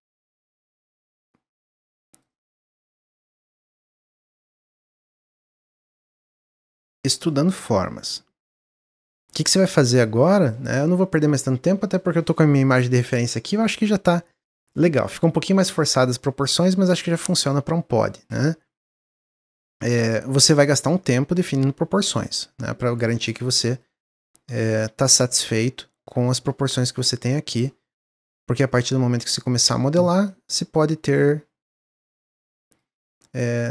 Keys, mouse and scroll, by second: 2.1 click, 2.5 middle click, 3.0 click, 3.5 shift+d, 5.2 click, 7.6 click, 10.1 click, 10.5-13.6 middle drag, 14.1-18.1 middle drag, 18.1 click, 19.7-21.0 drag, 22.9-25.2 middle drag, 25.2 click, 26.0 click, 27.4-28.8 drag, 29.9-31.6 middle drag, 31.6 click.